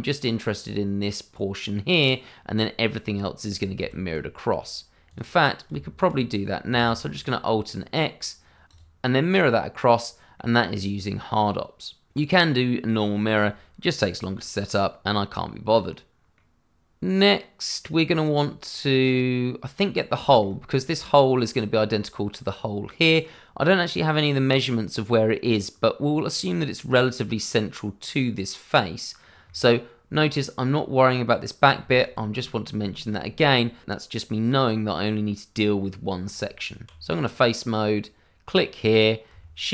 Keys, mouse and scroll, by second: 3.8 ctrl+z, 5.0 click, 5.7 Tab, 6.8 alt+x, 8.6 click, 10.3 middle click, 14.3 middle click, 16.3 middle click, 20.3 shift+middle click, 20.3 middle click, 32.9 shift+middle click, 33.0 middle click, 33.1 shift+middle click, 33.8 middle click, 36.4 Tab, 37.1 click, 38.5-39.3 scroll up 1.